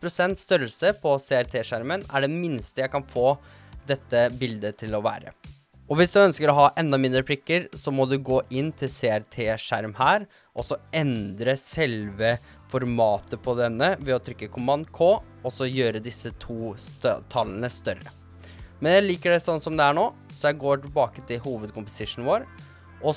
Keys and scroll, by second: 0.8-2.4 typing, 15.4 super+k.